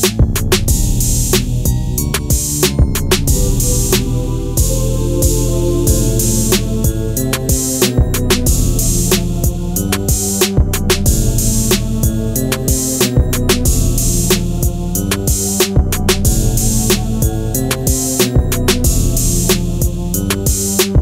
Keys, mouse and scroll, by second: 2.3 ctrl+a, 3.2-5.5 drag, 12.1-12.5 shift+drag, 15.4 alt+scroll up 2, 15.6-17.5 drag, 16.2-16.7 shift+drag.